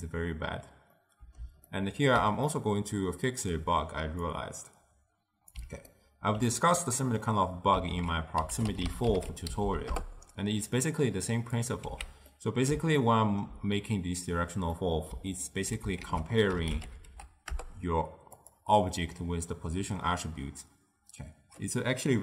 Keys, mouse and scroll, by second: 1.1-4.4 middle drag, 4.4 click, 6.0-8.0 ctrl+middle drag, 8.0 ctrl+a, 9.7 Down, 12.0 x, 12.4-14.8 middle drag, 14.8 scroll up 1, 15.0-16.1 middle drag, 16.1 ctrl+a.